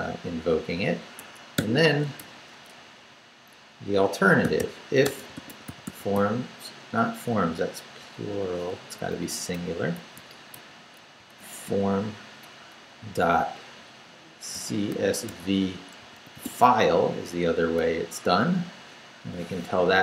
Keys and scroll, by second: 1.2 Escape, 1.6 o, 2.2 \, 2.8 BackSpace, 4.2-6.6 typing, 7.5 Left, 8.3 BackSpace, 8.9 Up, 10.2 Right, 10.5 BackSpace, 11.0 Down, 11.6 Right, 14.3-16.9 typing, 19.9 Up.